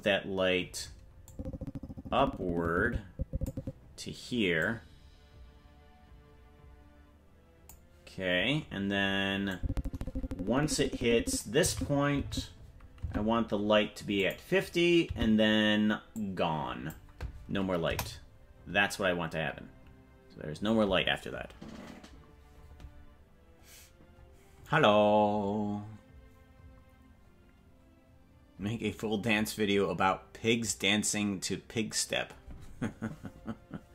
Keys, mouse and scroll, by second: 1.3-3.6 drag, 4.6-7.8 drag, 9.5-11.5 drag, 11.8 Right, 12.4 Right, 13.2 Left, 14.2 click, 15.3 Right, 16.1 click, 17.9 KP_0.